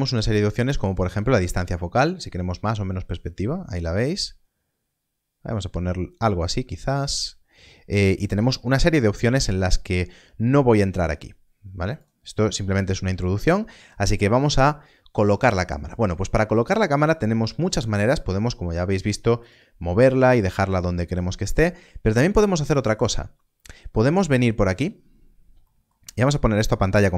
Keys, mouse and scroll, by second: 0.4 click, 11.9 click, 19.3 click, 25.6 middle click.